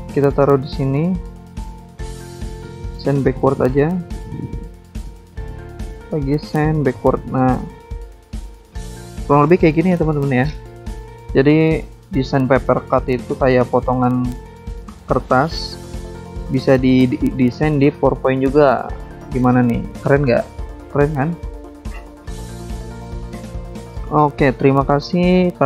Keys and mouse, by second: 2.5 click, 2.6 click, 4.2 ctrl+click, 6.1 shift+click, 8.7 click, 8.8 click, 8.9 click, 8.9 double click, 9.0 double click, 9.1 double click, 10.2 click, 10.4 click, 10.4 click, 10.5 click, 10.9 click, 11.0 double click, 11.1 click, 11.3 click, 11.6 click, 11.7 double click, 11.8 double click, 11.9 double click, 12.0 double click, 12.1 double click, 12.2 double click, 12.3 double click, 12.3 double click, 12.3 double click, 12.5 double click, 12.5 double click, 13.9 double click, 14.0 double click, 15.3 click, 15.4 click, 16.7 click, 16.9 click, 18.4 click, 18.5 click, 20.2 Escape, 20.7 click, 20.9 click, 21.8 click, 24.5 click, 24.6 click, 25.4 click, 25.5 click.